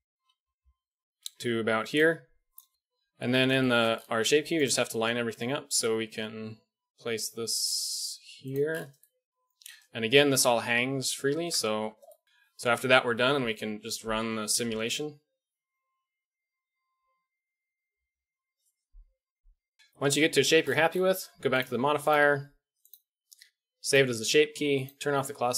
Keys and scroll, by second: 0.1 g, 2.7 Tab, 3.1 Tab, 5.1 g, 11.3 Tab, 13.7 alt+a, 18.8 alt+a, 19.3 KP_1.